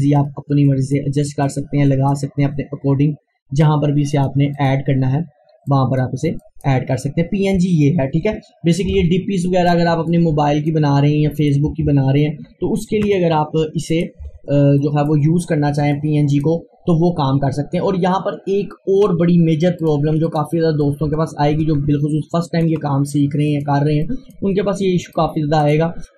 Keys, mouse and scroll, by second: 0.3-0.7 scroll up 1, 0.7 click, 2.4 scroll up 1, 4.1 click, 7.2 scroll down 1, 7.6 click, 8.4 scroll down 1, 8.9 Delete, 9.4 click, 11.7 Delete, 13.0 ctrl+z, 13.9 click, 14.3 Delete, 14.8 click, 19.8-25.7 drag, 25.7 right click.